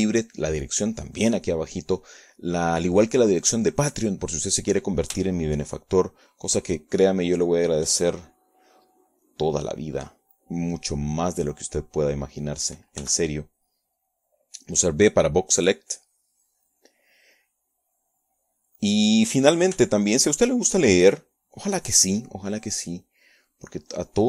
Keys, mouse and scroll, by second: 1.2-3.8 shift+drag, 5.1 click, 8.9 b, 11.4-13.5 drag, 15.7 b, 16.2 click, 18.1-20.3 drag, 20.3-23.5 middle drag, 20.9 KP_3, 23.5 click.